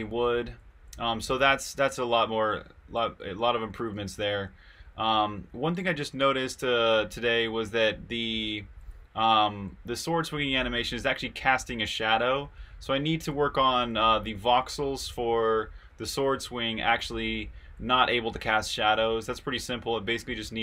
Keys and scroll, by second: 0.0-15.2 typing, 16.9-19.7 typing.